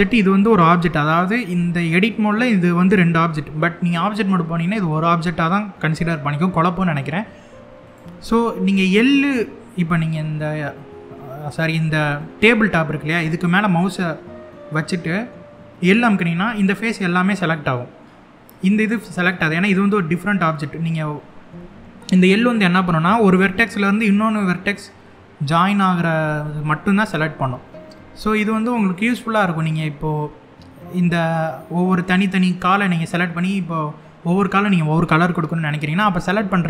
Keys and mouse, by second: 0.2 click, 7.5 click, 11.8 middle click, 15.5 l, 16.3-17.7 middle drag, 28.5 middle click, 31.0 middle click.